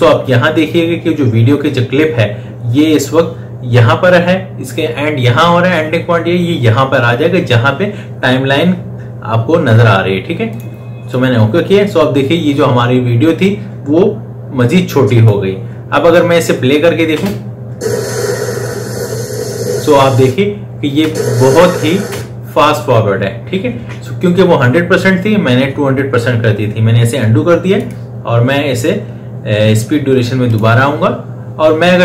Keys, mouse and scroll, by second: 10.3 click, 14.4-17.0 drag, 17.0 space, 20.8 space, 23.6 ctrl+z, 27.6 right click, 30.3 click.